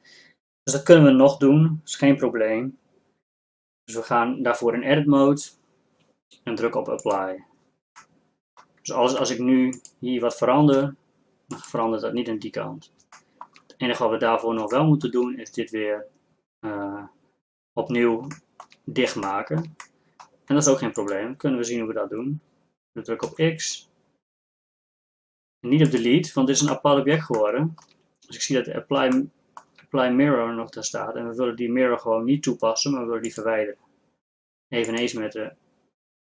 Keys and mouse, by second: 8.1-9.4 middle drag, 9.4 Tab, 11.0 g, 15.0-18.9 middle drag, 20.1 middle click, 20.7 Tab, 23.3 x, 26.3-30.7 middle drag, 30.7-36.2 drag.